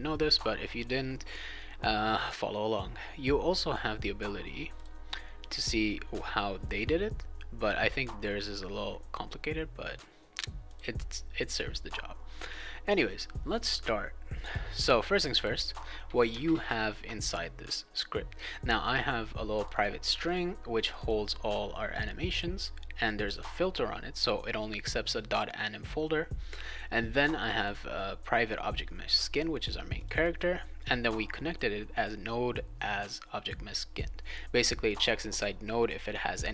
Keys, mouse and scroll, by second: 4.7 click, 10.7 click, 14.4 click, 15.3 click, 19.5 click, 19.7 click, 20.0 click, 20.2 click, 20.8 click, 20.9 click, 22.2 click, 23.0 click, 23.2 click, 27.3 click, 27.5 click, 29.9 click, 30.1 click, 34.8 click, 34.9 click, 36.4 click.